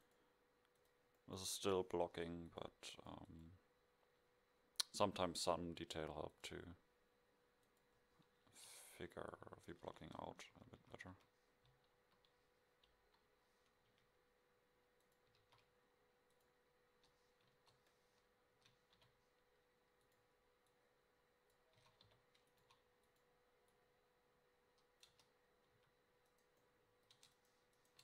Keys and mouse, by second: 1.2 middle click, 2.6-6.0 middle drag, 7.7 middle click, 8.5 KP_7, 10.4 Tab, 10.6-13.9 typing, 15.4 shift+a, 17.5 KP_0, 18.6 s, 21.9 s, 22.6 s, 25.2 Tab, 25.9 a, 27.3 Tab.